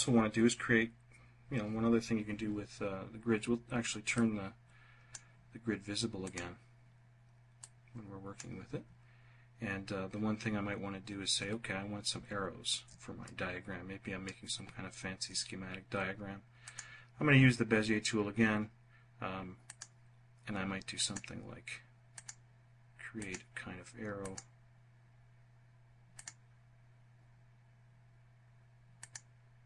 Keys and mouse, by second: 7.6 click, 12.4-13.5 drag, 15.8 click, 18.8 click, 20.1 click, 21.3 click, 22.4 click, 23.4 click, 25.4 click, 28.1 click, 29.0 click.